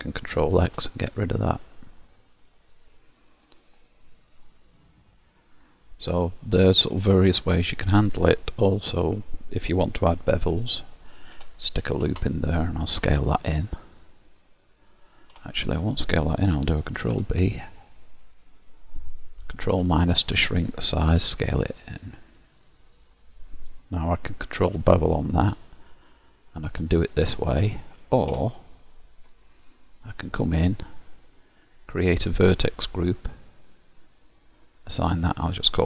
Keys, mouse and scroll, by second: 0.7 ctrl+x, 1.2-1.7 scroll down 1, 1.7 middle click, 1.7 scroll down 4, 3.9-4.6 scroll up 2, 4.6 middle click, 9.1-11.1 scroll up 1, 11.4 ctrl+r, 13.1 s, 17.1 ctrl+b, 20.0 ctrl+KP_Subtract, 21.2 s, 24.7 ctrl+b, 30.2 click, 31.9 click, 34.5 click, 35.3 click, 35.5 click.